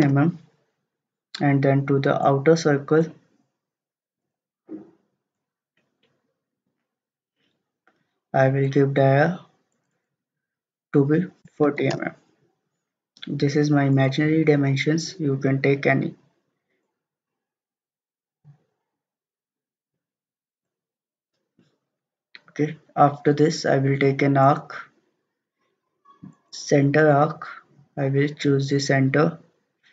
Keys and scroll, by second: 0.0-0.2 typing, 11.2-11.9 typing.